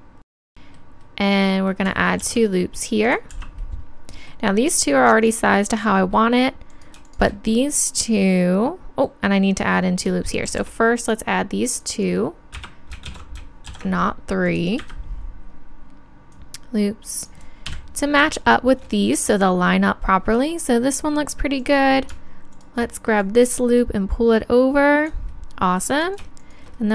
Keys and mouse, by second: 1.5 click, 2.2 ctrl+r, 6.7-7.8 drag, 7.8-9.5 middle drag, 10.5 ctrl+r, 13.1 ctrl+z, 13.7 ctrl+r, 16.3-17.7 drag, 17.7 KP_3, 21.6-25.0 right drag, 23.2-25.0 drag, 25.4-26.8 middle drag, 26.8 click.